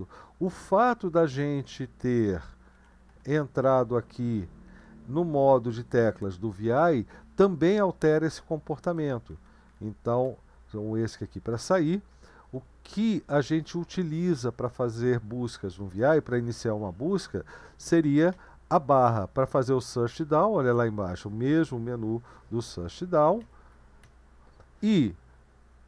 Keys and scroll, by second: 2.6 ctrl+b, 3.1 shift+;, 3.6 Up, 4.3 Up, 4.7 Down, 9.2 Down, 9.3 Down, 9.7 Down, 10.2 Escape, 18.3 /, 23.4 Escape, 24.0 Escape.